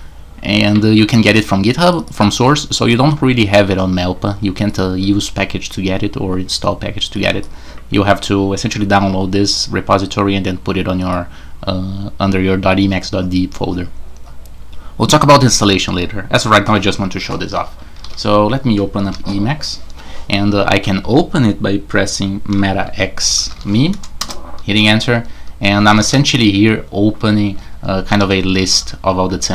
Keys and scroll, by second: 18.0 super+2, 19.0 super+e, 22.5 alt+x, 23.0-24.0 typing, 24.2 Return, 26.0 super+d, 27.2-29.5 typing.